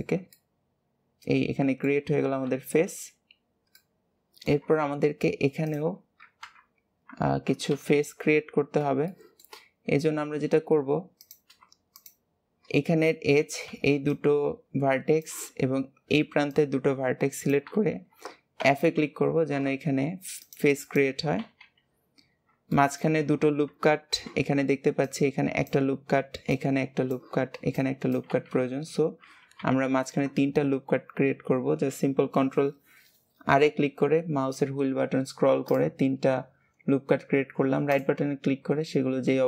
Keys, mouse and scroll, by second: 2.6 KP_3, 3.6 scroll down 1, 3.7 alt+z, 3.7 middle click, 4.6 alt+z, 4.7-5.6 scroll down 2, 5.6 click, 6.3 KP_1, 7.2 alt+z, 7.6 KP_3, 9.0 shift+middle click, 9.5-11.1 scroll up 2, 11.1 click, 11.9 shift+click, 20.3 shift+click, 20.8 shift+click, 21.3 f, 22.1-22.6 scroll up 1, 22.6-28.2 shift+middle drag, 28.6-29.1 scroll down 1, 29.5 ctrl+r, 38.6-39.4 scroll up 1.